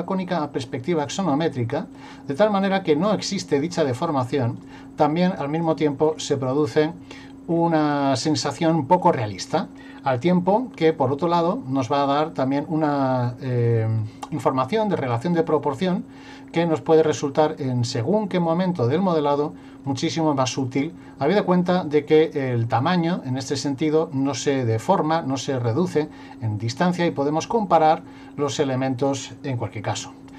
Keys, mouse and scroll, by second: 1.1 click, 2.7 click, 4.1 click, 6.1-6.8 scroll up 1, 6.8 middle click, 7.5-8.4 scroll up 1, 8.4 middle click, 12.9-14.7 scroll up 1, 19.9 click.